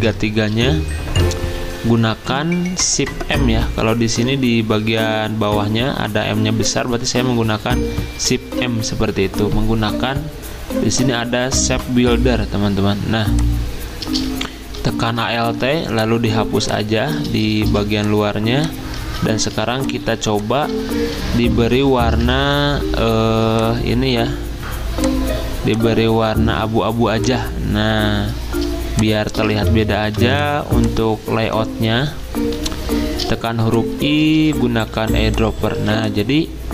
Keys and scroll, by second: 1.8 m, 8.2 m, 17.6 v, 19.0 ctrl+z, 19.5 z, 21.7 F6, 22.2 F6, 29.7 b, 30.1 v, 32.5 i, 35.0 v, 35.7 z.